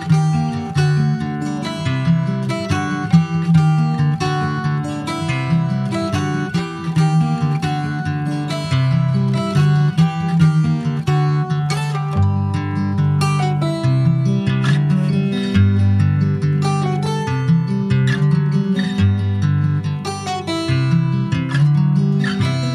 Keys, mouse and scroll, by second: 0.0 click, 0.5-1.6 drag, 2.4 click, 4.9 middle click, 5.6 ctrl+s, 7.1 scroll up 2, 9.0 ctrl+s, 9.2 scroll up 2, 9.8 click, 10.4 shift+middle click, 10.8 scroll up 2, 11.6 alt+middle click, 12.1 scroll up 3, 12.4 shift+middle click, 12.8 s, 14.6 click, 16.3 middle click, 16.5 ctrl+s, 17.1 /, 17.4-17.8 scroll down 2, 17.8 middle click, 18.7 ctrl+s, 20.7 click, 21.7 alt+middle click, 22.5 alt+middle click.